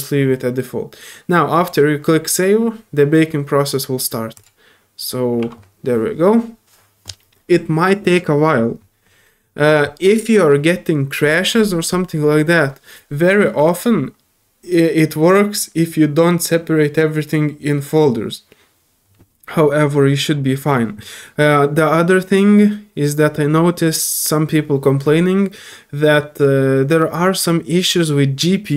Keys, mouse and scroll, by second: 4.3 click, 19.9 typing.